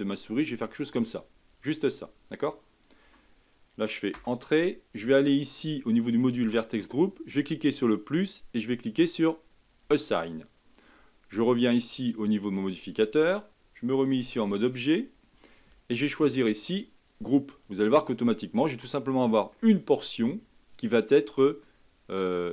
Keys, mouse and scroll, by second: 6.4 click, 8.2-12.7 drag, 16.2-18.0 drag, 18.0-19.6 middle drag, 19.6-20.4 scroll up 1, 20.4-20.7 scroll down 2, 20.9-22.1 middle drag, 22.1-22.5 scroll up 1.